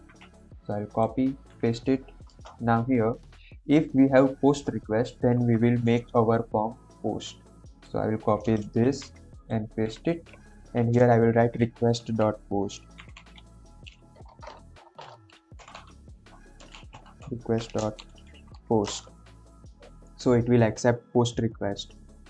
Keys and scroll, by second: 1.3 ctrl+v, 2.3 Return, 8.8 ctrl+c, 9.6 ctrl+v, 10.5 Left, 12.8-14.1 typing, 15.3-19.0 typing.